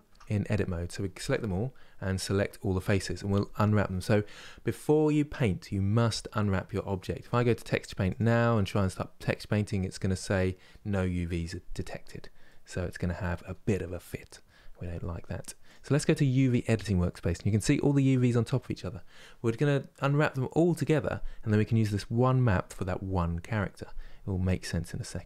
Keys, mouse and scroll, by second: 7.8 click, 12.1-15.3 middle drag, 15.3-24.1 drag, 24.1-24.8 scroll down 3, 24.8-25.2 shift+middle drag.